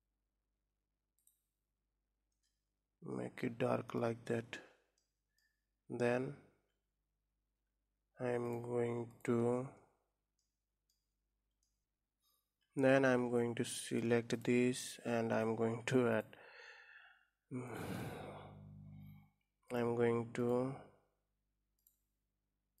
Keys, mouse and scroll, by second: 3.0-7.9 middle drag, 8.2-10.2 drag, 10.2 middle click, 11.1 scroll up 1, 11.6 middle click, 11.8-12.7 scroll up 2, 12.9 Tab, 13.5 middle click, 14.2-15.5 drag, 16.7 click, 20.4 click, 21.6-22.8 drag.